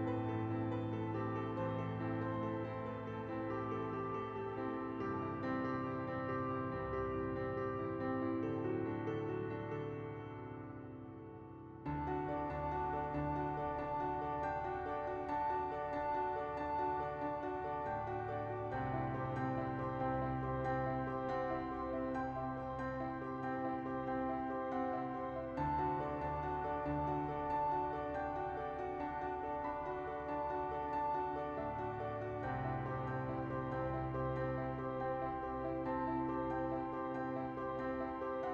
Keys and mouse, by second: 0.1 middle click, 0.8 p, 1.4 Tab, 1.7 click, 2.1 KP_1, 2.4 Tab, 4.1 shift+middle click, 5.2 right click, 6.1 middle click, 6.9 right click, 7.5 middle click, 10.9-12.0 right drag, 12.3 Tab, 13.4 /, 14.4 middle click, 14.7 middle click, 14.9 middle click, 16.4 middle click, 16.8 /, 17.2 shift+middle click, 17.5 2, 17.7 Tab, 18.5 ctrl+j, 18.9 Tab, 20.5 click, 21.1 Tab, 21.3 Tab, 21.6 shift+middle click, 22.5 alt+shift+middle click, 23.2 ctrl+b, 24.3 Tab, 25.0 /, 25.5 shift+middle click, 25.8 KP_1, 28.4 click, 28.9 shift+middle click, 29.4 Tab, 30.0 Tab, 30.7 middle click, 31.6 shift+a, 34.0-35.4 drag, 35.8 middle click, 36.3 click, 36.8 shift+middle click, 37.2 KP_1, 37.5 s.